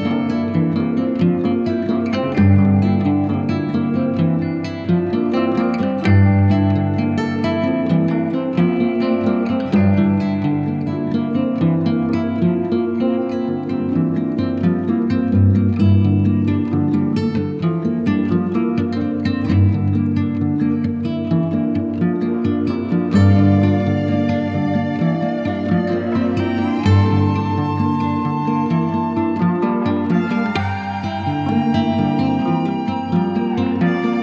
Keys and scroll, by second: 4.5 shift+5, 6.1 ctrl+alt+x, 7.8 ctrl+alt+x, 10.2 ctrl+alt+x, 11.7 space, 13.9 super+x, 14.6 space, 19.1 shift+x, 20.2 shift+x, 22.1 ctrl+alt+x, 23.3 z, 23.8 b, 26.7 shift+x, 28.9 ctrl+alt+x, 29.4 super+z, 29.4 super+x, 31.4 ctrl+alt+x, 32.9 shift+x.